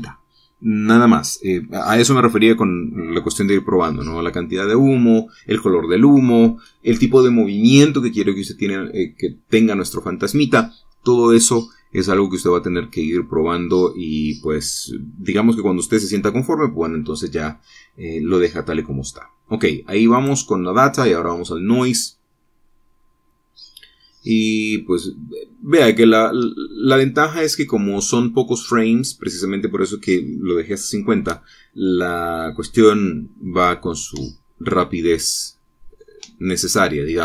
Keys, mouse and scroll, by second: 20.5 middle click, 21.3 click.